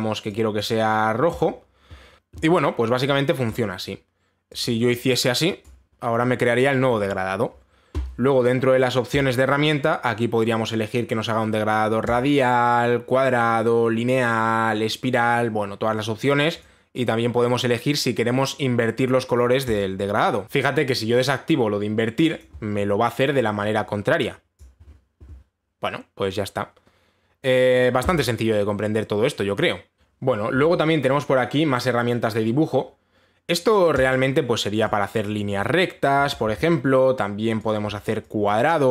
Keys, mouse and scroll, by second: 1.2 click, 2.0 click, 2.1 click, 2.5 click, 4.2 click, 6.2 click, 9.8 click, 12.8 click, 17.2 click, 20.4 click, 23.0 click, 25.2 click, 30.3 Delete, 34.6 click, 36.0 click, 37.1 ctrl+z, 38.3 click.